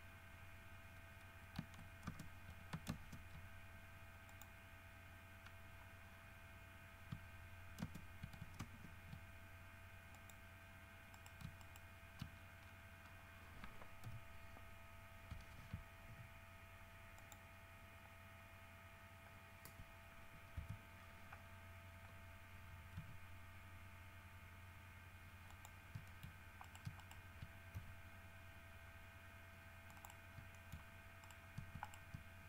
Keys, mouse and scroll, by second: 2.3 shift+space, 3.1 shift+space, 4.5 click, 8.0 shift+space, 8.8 space, 10.3 click, 11.4 right click, 11.8 shift+right click, 12.5-13.1 shift+scroll down 3, 13.3-13.9 scroll up 4, 15.9 Escape, 16.3 ., 17.4 middle click, 18.2 scroll up 2, 18.6 scroll down 2, 20.8 KP_3, 21.7 scroll up 2, 23.2 g, 25.7 middle click, 26.1 scroll down 3, 26.3 shift+middle click, 26.9 shift+right click, 27.2 shift+right click, 28.0 shift+g, 30.1 middle click, 30.2 click, 30.5 scroll down 3, 30.7 shift+middle click, 31.4 shift+right click, 32.1 shift+right click.